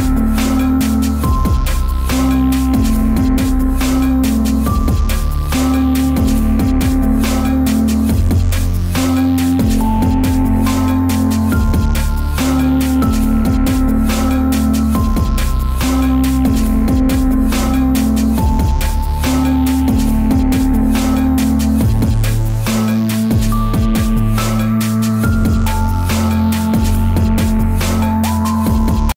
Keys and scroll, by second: 6.3-7.2 typing, 16.7-17.6 typing, 19.1 typing, 21.0-21.8 typing, 26.2 Return.